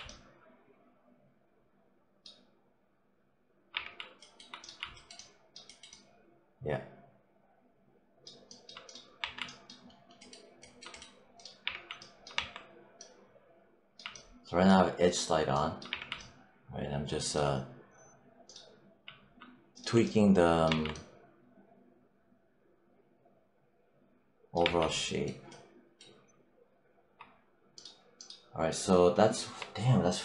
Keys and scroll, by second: 3.6 3, 9.1 1, 11.5 3, 12.2 1, 15.7 3, 20.5 1, 24.5 3.